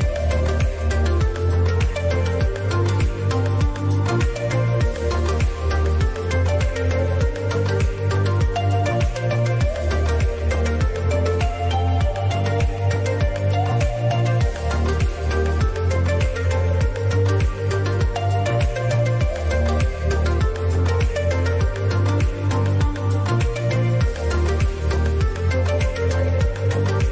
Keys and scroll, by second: 5.6 ctrl+KP_Subtract, 5.8 ctrl+KP_Subtract, 6.3 ctrl+KP_Subtract, 9.6 ctrl+KP_Add, 9.9 ctrl+KP_Add, 11.0 ctrl+KP_Add, 19.5 ctrl+z, 21.9 ctrl+z.